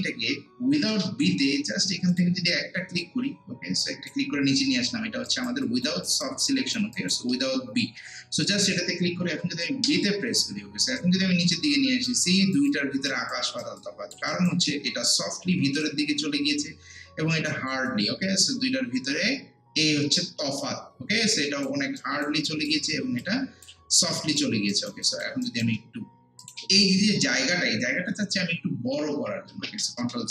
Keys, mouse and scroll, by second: 0.9 b, 2.1-5.3 drag, 5.3 alt+right click, 5.6 alt+click, 6.1 alt+right click, 6.5 alt+click, 7.0 alt+right click, 7.3 alt+middle click, 8.5 click, 9.9 b, 11.0-12.4 drag, 12.4 alt+right click, 12.7 alt+click, 13.3 alt+right click, 13.8 click, 14.3 alt+right click, 14.7 alt+middle click, 15.8 click, 17.5 alt+right click, 17.9-24.7 alt+drag, 22.0 alt+right click, 24.7 alt+right click, 25.1 alt+click, 25.4 alt+right click, 26.4 click, 29.5 ctrl+z.